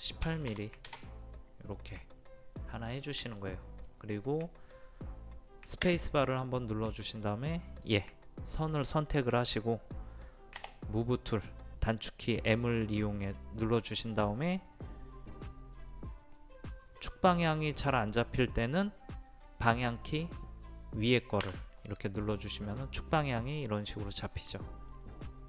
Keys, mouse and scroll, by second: 0.2 KP_1, 0.5 KP_8, 2.0-5.0 middle drag, 6.0 space, 7.7 click, 10.6 m, 11.9 click, 16.3-16.6 scroll up 1, 21.4 Up.